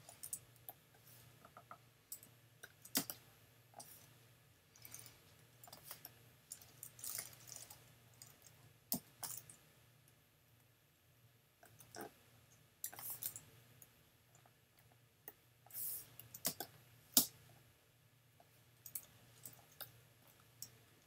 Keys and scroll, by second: 3.0 alt+super+space, 3.9 space, 5.7 space, 8.9 n, 12.8 super+j, 16.4 super+space, 19.5 v, 20.4 super+v.